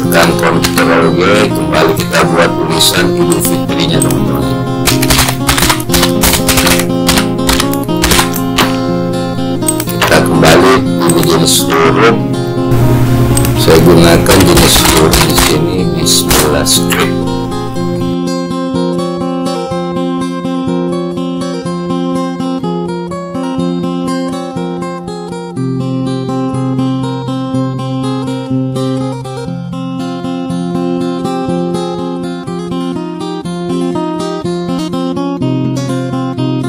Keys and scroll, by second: 0.7 ctrl+g.